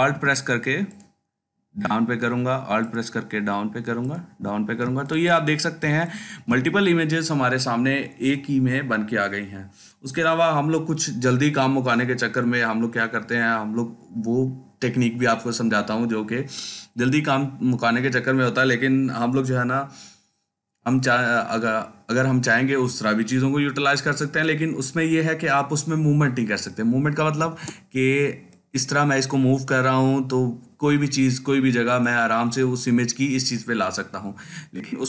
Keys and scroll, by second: 4.7 ctrl+space, 5.2 ctrl+space, 5.3 ctrl+space, 5.4 ctrl+space, 6.0 ctrl+space, 27.3 ctrl+t, 34.9 ctrl+space.